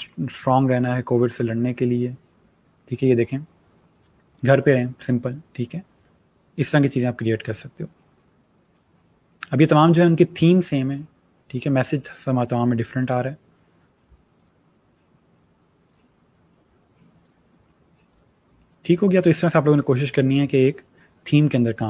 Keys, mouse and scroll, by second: 2.8 click, 6.8 click, 12.9 click, 19.5 click.